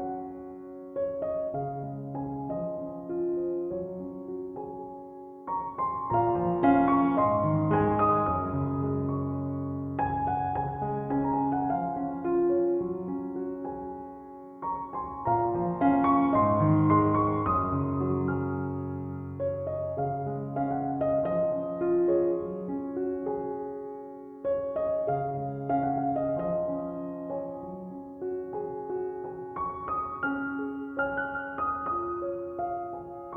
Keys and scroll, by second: 22.3 ctrl+s.